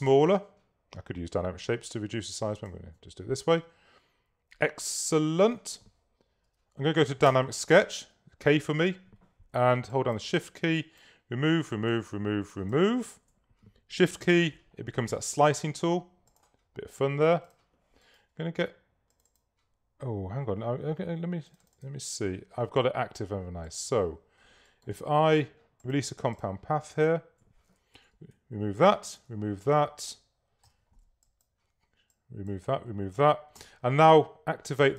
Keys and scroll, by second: 7.4 k, 28.1 BackSpace, 29.3 BackSpace, 33.6 shift+v.